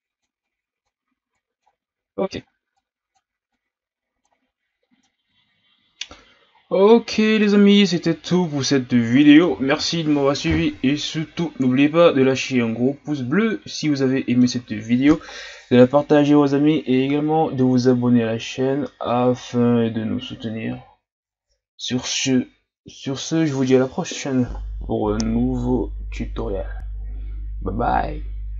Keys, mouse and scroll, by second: 1.6 scroll down 3, 2.3-2.7 shift+scroll up 2, 2.7-5.0 drag, 5.0-6.5 middle drag, 6.5-7.0 scroll up 3, 7.0-7.4 scroll down 2, 7.4-13.5 middle drag.